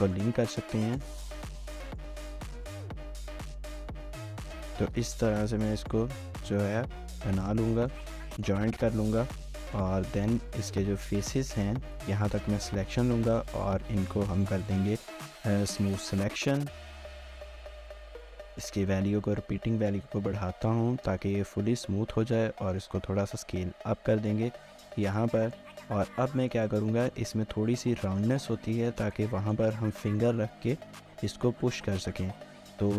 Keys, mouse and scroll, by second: 0.9 shift+click, 1.5-4.5 typing, 1.8 shift+click, 2.1 shift+click, 2.4 shift+click, 2.8 shift+click, 3.2 shift+click, 3.5 shift+click, 3.8 shift+click, 4.3 shift+click, 7.0 middle click, 10.3 middle click, 10.6 ctrl++, 10.8 ctrl++, 11.0 ctrl++, 11.2 ctrl++, 11.9 ctrl++, 13.2 right click, 14.4 1, 14.7 right click, 22.2 s, 24.6 middle click, 26.0 Tab, 26.4 shift+middle click, 28.8 scroll down 1, 29.0 shift+middle click, 32.8 Tab.